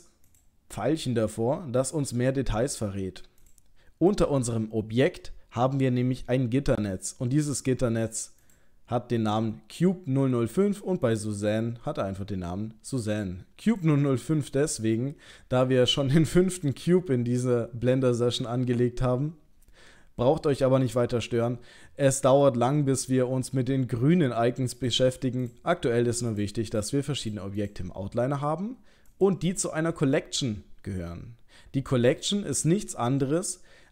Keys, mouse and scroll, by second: 0.2 click, 1.8 click, 3.5 click, 4.1 click, 8.4 click, 11.1 click, 13.7 click, 24.8 click, 25.5 click, 26.3 click, 26.8 click, 27.2 click, 27.6 click, 29.1 click.